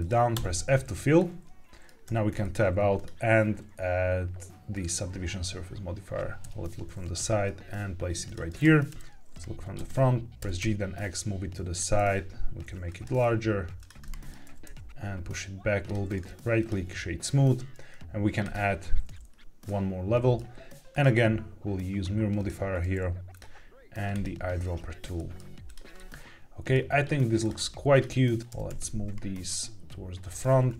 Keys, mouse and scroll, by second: 0.3 f, 1.1 middle click, 2.0 Tab, 2.3 shift+middle click, 2.9-4.8 drag, 6.3 KP_3, 7.1 g, 8.2 click, 8.8-10.5 typing, 10.2 Escape, 11.6 click, 11.9 s, 12.8 click, 13.0 g, 13.1 z, 13.7 click, 14.0 middle click, 14.4 g, 14.6 y, 15.8 click, 16.0 right click, 18.3 click, 19.2-19.6 scroll down 1, 19.6-20.3 middle drag, 20.3 scroll down 1, 20.8-22.4 drag, 22.4 middle click, 22.4 scroll down 1, 23.2 click, 25.1 middle drag, 25.6 click, 25.9 middle click, 27.3 click, 27.8 shift+click, 28.3 g, 28.3 z, 28.4 Escape, 28.4 click, 28.4 middle click, 28.6 y, 30.1 click, 30.6 shift+click.